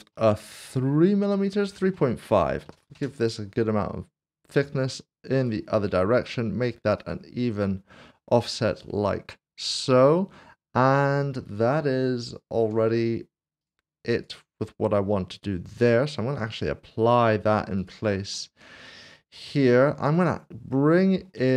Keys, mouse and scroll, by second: 1.5-2.6 typing, 3.0 Return, 4.7 click, 7.0 click, 12.6 click, 16.5 click, 18.3 click, 18.5 middle click, 20.1 middle click.